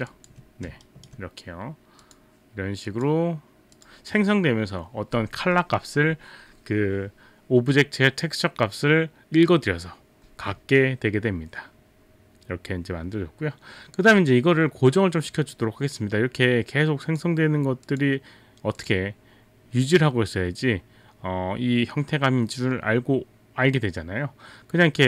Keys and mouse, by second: 0.3 alt+click, 0.3 alt+click, 0.3 alt+right click, 0.7 alt+click, 0.7 alt+right click, 0.8 alt+right click, 2.0 click, 17.0 click, 17.9 click, 18.8 click.